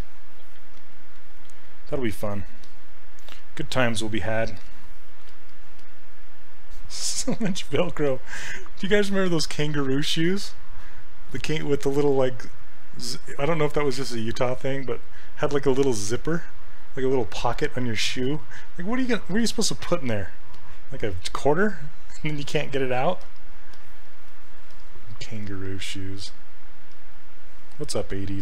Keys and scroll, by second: 0.8 s, 25.4 s.